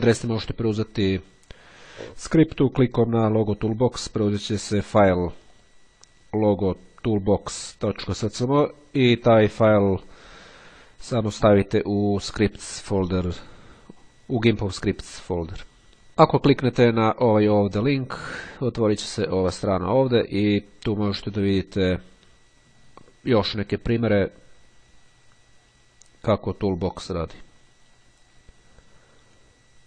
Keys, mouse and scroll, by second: 0.2-2.3 scroll down 2, 5.5 click, 15.9 click, 15.9-16.9 scroll up 1, 19.3 click, 20.8-22.9 scroll down 2, 24.3-26.3 scroll down 2, 27.3-27.6 scroll down 1, 28.9 scroll down 1.